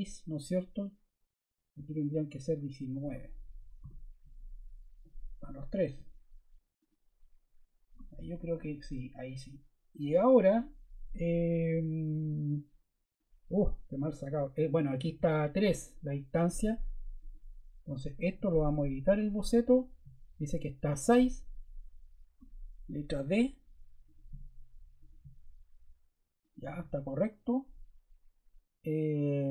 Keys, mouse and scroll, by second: 3.2-4.2 typing, 23.0 d, 27.4 click.